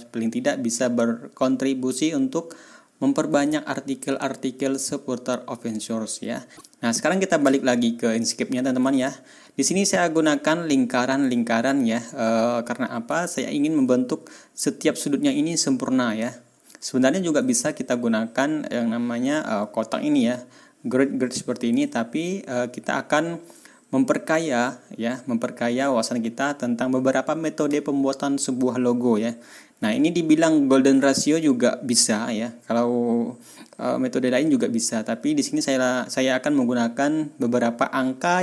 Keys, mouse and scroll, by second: 8.2 scroll up 2, 9.0 ctrl+scroll down 2, 9.4-10.1 ctrl+scroll up 4, 11.3 ctrl+scroll down 2, 13.4 ctrl+scroll up 2, 16.4 ctrl+scroll down 2, 16.9 ctrl+scroll up 2, 21.8 ctrl+scroll down 2, 30.0-30.3 ctrl+scroll down 2, 31.4 ctrl+scroll up 2, 33.3 ctrl+scroll up 2.